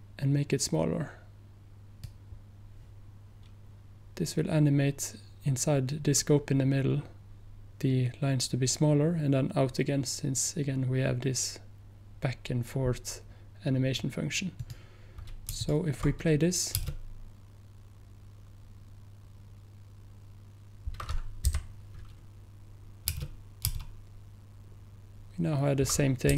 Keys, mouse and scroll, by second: 15.7 ctrl+click, 21.6 p, 22.8 p.